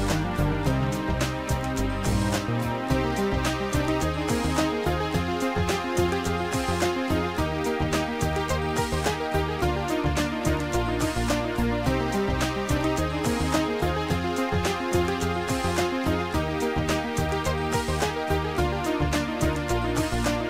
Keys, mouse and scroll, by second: 3.0 click, 4.2 click, 6.9 click, 7.5 click, 8.0 click, 11.0 click, 12.2 click, 15.4 click, 18.5 click, 20.1 click.